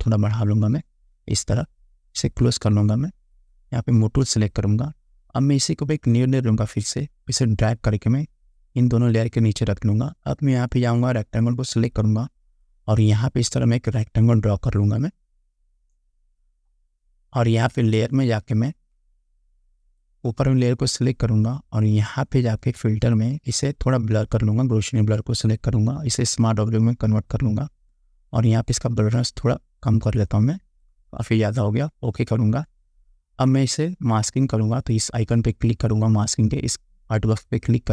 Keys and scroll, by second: 3.5 ctrl+j.